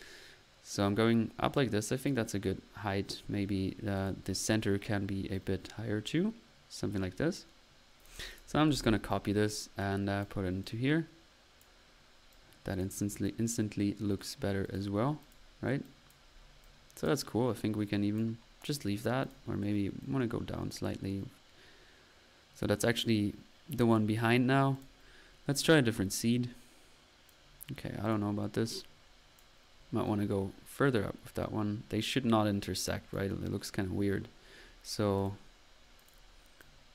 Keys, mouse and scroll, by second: 3.9-4.2 drag, 5.3-7.5 drag, 8.3 click, 8.3 typing, 8.7 ctrl+c, 8.8 ctrl+v, 9.1 ctrl+middle click, 9.7-11.1 typing, 9.8 ctrl+drag, 13.0-14.0 drag, 13.0-13.7 typing, 14.6 click, 15.2 click, 16.3 click, 17.1 click, 18.2-18.5 drag, 19.2 click, 20.0-22.1 drag, 23.9 click, 24.7 click, 25.7-27.5 drag, 28.0 drag, 28.8 click, 35.1 click, 36.0-36.3 drag, 36.6-36.9 drag.